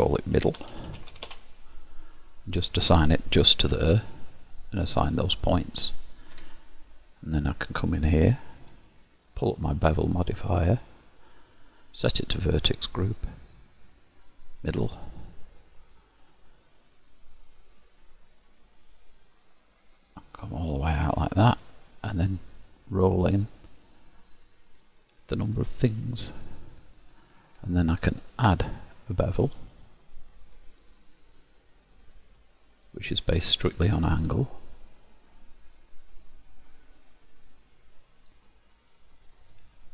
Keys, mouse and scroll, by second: 1.0 d, 4.7 click, 6.5 Tab, 8.3 click, 9.5 click, 12.3 click, 13.8 click, 17.6 click, 22.5 click, 28.3 click, 32.2 click, 33.6 click, 35.4 click, 36.3 click, 39.3 click, 39.5 click.